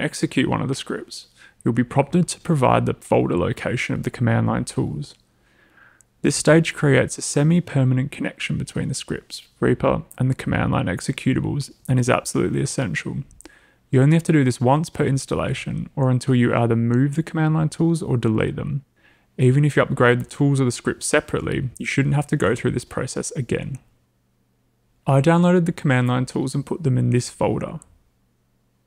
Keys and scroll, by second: 25.9-28.8 typing.